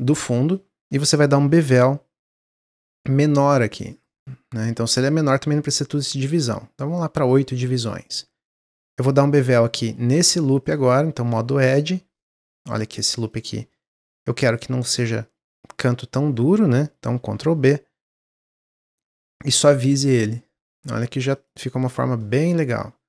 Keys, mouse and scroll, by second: 1.3 ctrl+b, 5.0-7.6 drag, 7.6-8.9 middle drag, 8.9 alt+click, 10.6 click, 11.6 alt+click, 12.1 middle click, 12.4 scroll up 1, 12.6-16.7 middle drag, 17.0 ctrl+b, 19.4 Tab, 19.7 scroll down 1, 20.0-20.7 middle drag, 20.7-21.0 scroll down 1, 21.0 middle click, 21.3-22.2 right drag, 22.2-23.0 middle drag.